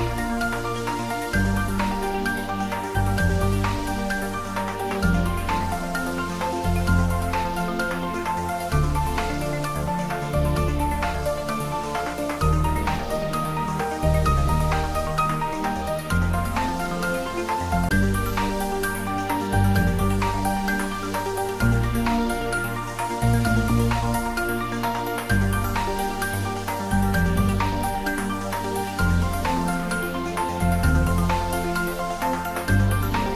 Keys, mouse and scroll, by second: 1.0 shift+d, 3.8 scroll up 1, 4.3-6.3 middle drag, 6.3 click, 11.1 scroll down 1, 13.2 shift+d, 22.0 click, 22.7 `, 23.1 3, 24.5 scroll up 1, 25.9 g, 28.6 click, 28.9 scroll down 1, 31.0-33.3 drag.